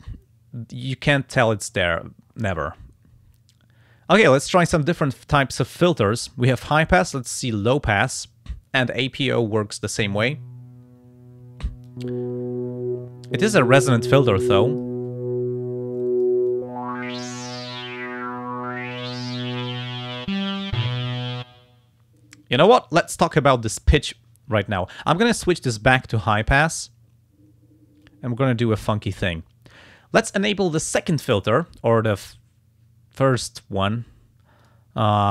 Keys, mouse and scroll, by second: 7.6 click, 11.9-15.0 drag, 16.0 click, 16.5-20.6 drag, 24.9 click, 26.4 click, 28.0-29.4 drag, 34.6 click.